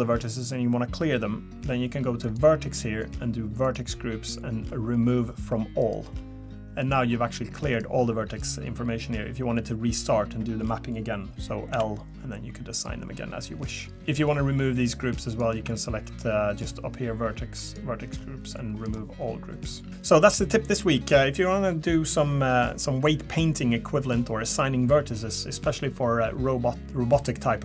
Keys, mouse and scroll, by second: 2.2 click, 6.8 click, 7.7 click, 8.3 click, 11.7 l, 14.0 click, 15.3 click, 15.6 a, 16.6 click.